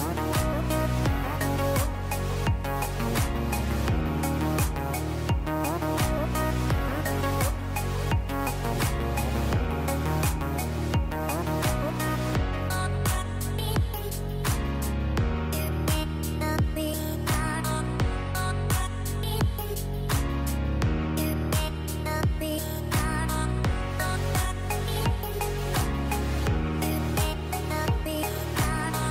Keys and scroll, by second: 2.0 space, 6.0 space, 11.3 space, 18.7 space, 19.5 space.